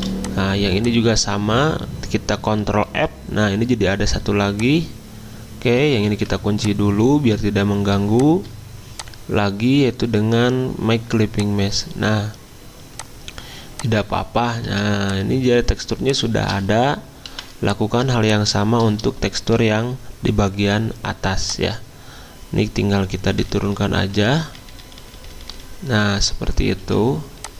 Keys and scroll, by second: 4.8 ctrl+f, 6.1 ctrl+2, 7.1 ctrl+z, 14.6 z, 15.9 space, 18.5 v, 23.4 ctrl+[, 23.5 ctrl+[, 23.7 ctrl+[, 24.1 ctrl+[, 26.8 z.